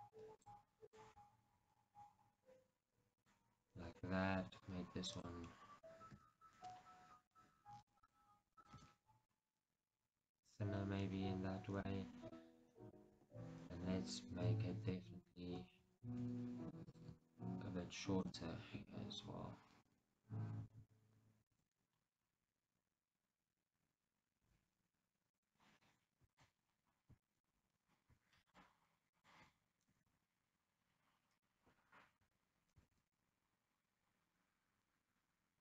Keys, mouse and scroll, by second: 0.3-8.2 middle drag, 1.3 g, 3.4 click, 5.4 click, 6.3 g, 8.7 click, 8.9-10.6 middle drag, 8.9 g, 10.6 click, 10.8-11.2 scroll down 2, 11.2-17.0 middle drag, 13.3 KP_1, 16.3 shift+z, 17.0 click, 17.4 ctrl+right click, 21.0 z, 21.7 g, 25.6 click, 26.5 alt+click, 26.9-27.4 scroll up 1, 27.4-28.7 shift+middle drag, 27.7 scroll up 1, 28.7-30.1 alt+shift+drag, 30.1 g, 31.6 right click, 32.3 o, 33.0 g.